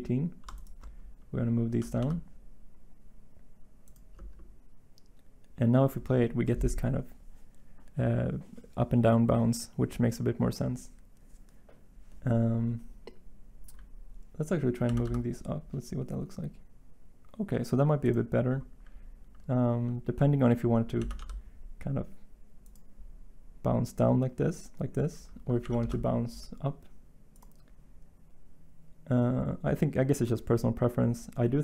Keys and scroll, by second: 1.6 g, 1.9 y, 14.8 g, 15.0 y, 20.9 g, 21.1 y, 25.6 g, 25.8 g.